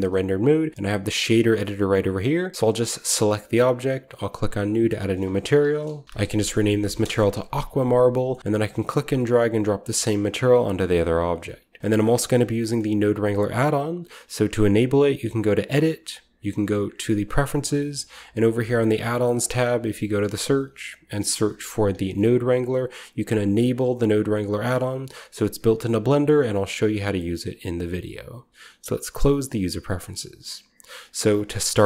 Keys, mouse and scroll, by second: 1.0 click, 3.2 click, 4.0 click, 4.0 typing, 4.8-6.0 drag, 5.5-9.4 typing, 7.5-8.1 scroll down 1, 8.0 middle click, 8.1 scroll up 1, 8.8-9.4 scroll up 1, 8.9 click, 9.4 middle click, 9.7 scroll up 1, 9.8-11.8 drag, 11.0-11.6 scroll up 1, 11.1-11.8 typing, 15.5 click, 17.1 click, 18.1 click, 19.2 click, 19.9 click, 21.2-22.0 typing, 22.5 click, 25.2 click, 26.3 click, 26.5 click, 27.1 click, 29.1 click, 30.9 click.